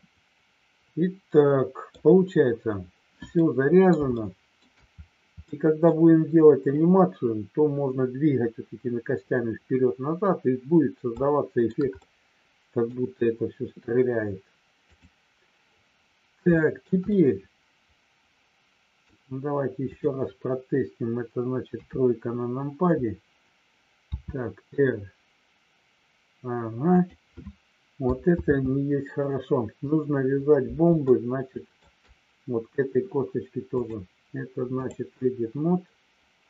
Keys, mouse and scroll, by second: 0.0-2.1 middle drag, 3.4 middle click, 4.0 shift+middle click, 5.4 middle click, 11.3 shift+middle click, 11.9 scroll up 1, 12.1 middle click, 14.9 click, 16.7 shift+middle click, 17.0-19.1 middle drag, 19.8 click, 21.7 KP_3, 24.0 r, 28.4 ctrl+z, 31.0 shift+middle click, 33.8-35.0 drag.